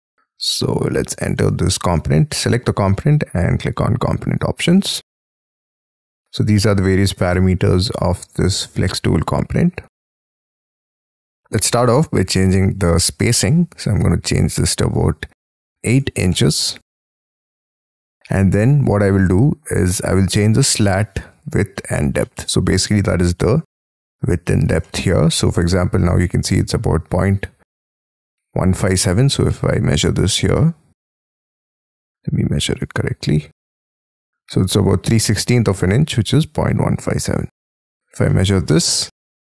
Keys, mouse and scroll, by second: 0.4-0.8 scroll up 13, 1.3 double click, 1.8 double click, 2.5 scroll down 5, 15.7 8, 16.2 shift+', 17.2 Tab, 18.3 middle click, 19.5-19.8 scroll down 6, 22.2 shift+middle click, 22.7-24.6 scroll up 38, 24.8 shift+middle click, 27.0-27.9 scroll up 13, 27.9 t, 28.9 Escape, 31.2 Escape, 31.4 scroll up 2, 31.6 middle click, 36.3 Escape, 38.2 middle click.